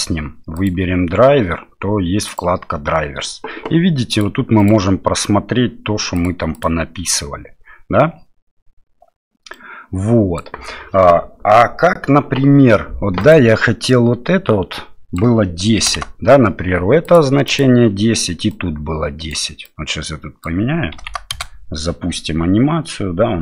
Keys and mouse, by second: 0.5 click, 2.4 click, 4.1 click, 4.6 click, 6.1 click, 6.5 click, 9.5 click, 13.3-17.1 drag, 17.4 click, 18.7-21.7 drag.